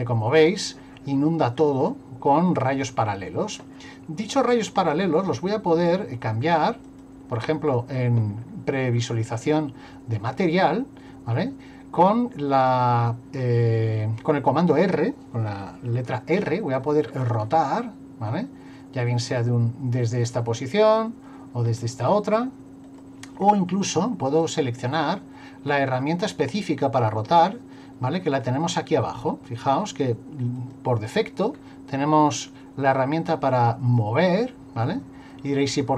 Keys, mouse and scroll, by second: 4.8 click, 8.4 scroll down 1, 8.9 scroll down 1, 10.2 middle click, 16.4 r, 20.2 middle click, 21.7 r, 23.4 scroll down 1, 24.4 middle click, 30.6 click, 31.5-32.4 scroll down 1, 32.4 click, 33.5 click, 34.9 click.